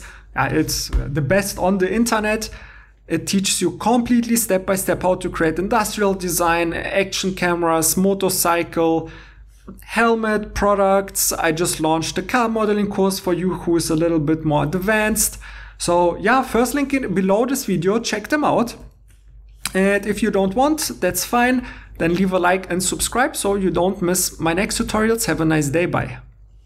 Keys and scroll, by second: 19.0 alt+Tab.